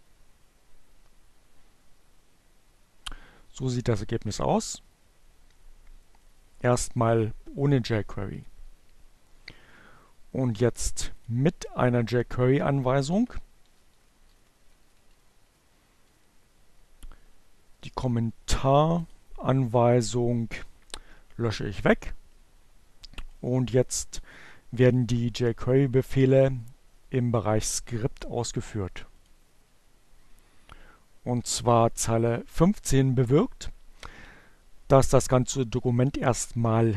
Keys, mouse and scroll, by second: 3.5-4.6 drag, 5.2-7.3 drag, 11.6 Delete, 13.8 Down, 13.8 Delete, 18.3 click, 22.2-23.9 drag, 26.8 click, 28.0-29.0 drag, 34.3-36.9 drag.